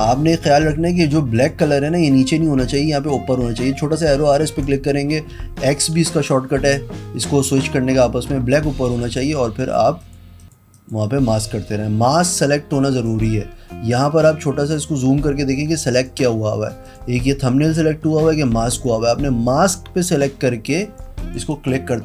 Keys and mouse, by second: 1.5 click, 2.9 click, 4.5 click, 4.7 click, 6.1-7.7 typing, 9.4 click, 10.2 click, 10.5 click, 10.9 click, 13.2 click, 16.0 click, 17.0 click, 18.9 click, 20.9 click, 21.6 click.